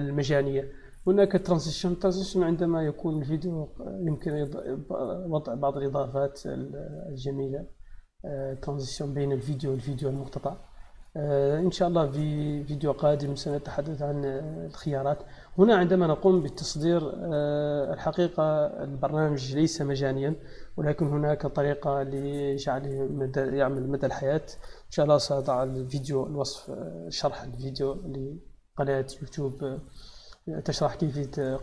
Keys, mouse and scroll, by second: 12.5-14.4 middle drag.